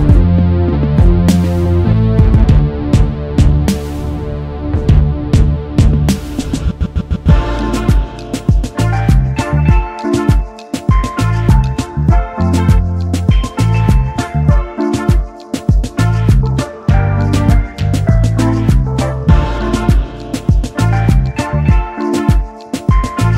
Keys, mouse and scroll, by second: 1.8 ctrl+x, 4.2 double click, 5.3 ctrl+f, 6.3 double click, 6.4 space, 6.5 double click, 9.6 ctrl+x, 11.7 double click, 12.9 ctrl+f, 13.8 double click, 14.2-15.0 alt+scroll down 1, 15.5 alt+scroll up 1.